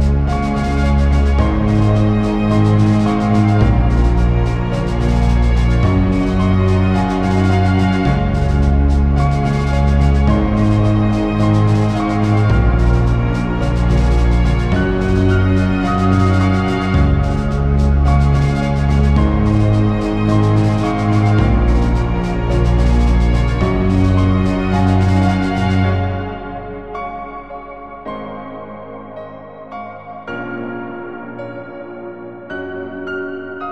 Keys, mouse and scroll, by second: 0.3 alt+a, 0.3 click, 0.4 right click, 0.7 scroll down 2, 0.8 alt+a, 0.9-1.2 scroll up 3, 1.0 shift+middle click, 1.2 middle click, 1.9-2.3 scroll down 4, 2.1 scroll up 4, 2.3 scroll down 1, 2.4 scroll down 1, 2.5 middle click, 2.7 scroll down 2, 2.8 scroll up 1, 3.7 click, 3.8-4.4 scroll down 4, 4.1 click, 4.8 click, 5.6 KP_Decimal, 5.9 shift+middle click, 5.9 scroll down 3, 6.0-6.4 scroll up 4, 6.1 middle click, 6.4 click, 7.0 r, 8.3 middle click, 8.8 r, 9.5 click, 9.7-10.1 scroll down 3, 9.8 shift+middle click, 10.1-10.4 scroll up 3, 10.2 middle click, 10.4 click, 11.1 click, 11.8 r, 12.7 click, 13.7 alt+a, 13.9 click, 14.2 click, 14.9 alt+a, 16.6 alt+a, 16.6 scroll down 5, 16.7-17.1 scroll up 6, 17.1 scroll down 1, 17.3 shift+middle click, 17.4 ctrl+middle click, 18.2 click, 18.7-19.4 scroll down 6, 18.9 shift+middle click, 19.1 middle click, 19.4 click, 19.5-19.8 scroll up 1, 20.0 click, 20.0-20.4 scroll up 1, 20.6 scroll up 1, 20.8 scroll down 1, 21.0 click, 22.3 middle click, 22.4-23.1 scroll down 5, 22.7 click, 25.3 click, 26.3-26.9 scroll up 7, 26.4 middle click, 26.7 middle click, 27.3 middle click, 27.5 scroll down 3, 27.7 scroll up 1, 28.9 click, 29.4 middle click, 29.7 alt+a, 29.8 click, 30.1 click, 30.5 click.